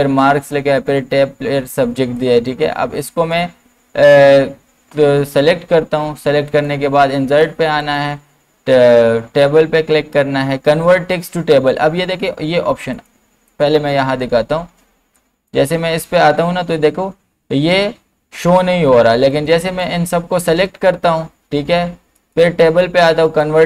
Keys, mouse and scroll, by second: 2.2-5.7 drag, 6.5 click, 12.9 click, 19.3-22.2 drag.